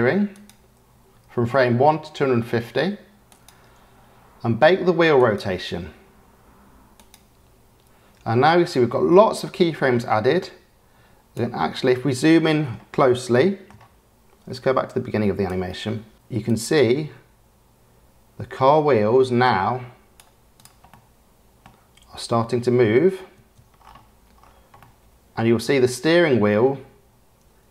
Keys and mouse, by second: 0.3-3.7 drag, 5.1-7.4 middle drag, 7.4 click, 9.9 click, 10.5 middle click, 10.9 click, 13.3-13.7 shift+middle drag, 14.8-15.4 middle drag, 16.1 KP_Decimal, 16.4-20.1 middle drag, 20.9-21.6 middle drag, 22.3 space, 23.3 space, 24.7-25.1 drag, 25.1-25.4 middle drag, 25.6 space.